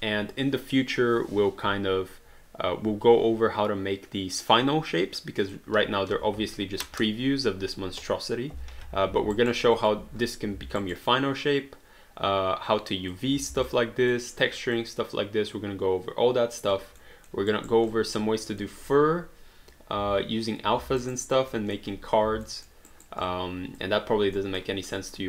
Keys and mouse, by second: 5.4 click, 6.1 1, 8.6 3, 9.1 alt+d, 9.4 alt+right click, 9.8 alt+click, 10.9 alt+right click, 11.1 alt+click, 13.7 alt+click, 14.8 alt+click, 17.0 alt+middle click, 17.5 alt+right click, 17.9 alt+click, 18.4 alt+middle click, 21.0 alt+right click, 21.5 alt+middle click, 22.5 alt+middle click, 22.9 alt+right click, 23.2 alt+click, 24.4 alt+middle click, 25.0 alt+click.